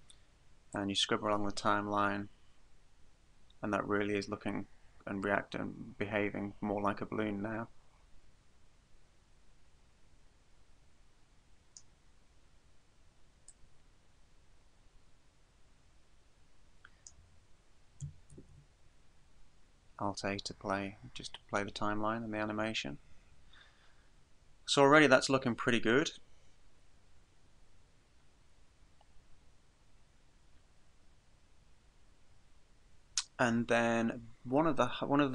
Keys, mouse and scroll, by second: 0.7 click, 12.3-13.5 scroll down 1, 13.5 click, 13.5-13.8 scroll down 1, 18.4 alt+a.